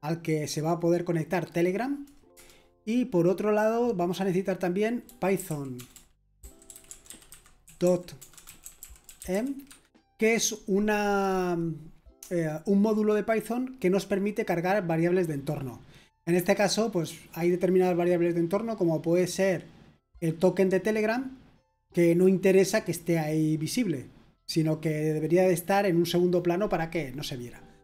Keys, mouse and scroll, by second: 5.1-9.5 typing.